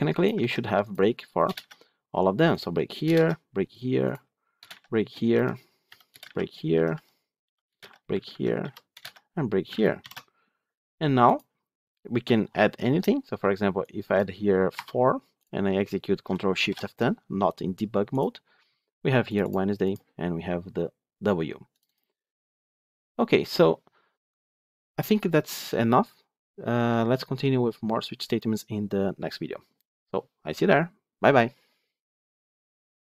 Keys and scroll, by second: 0.2 ctrl+c, 1.4 ctrl+v, 9.9 ctrl+v, 9.9 ctrl+alt+l, 16.5 ctrl+shift+F10.